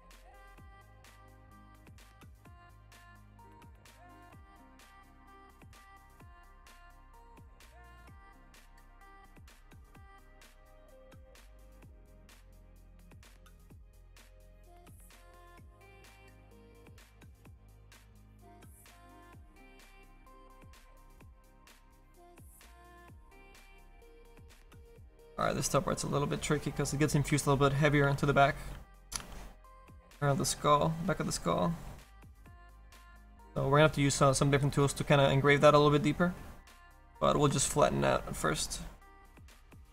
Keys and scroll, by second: 27.3 s, 28.0 s, 29.2 s.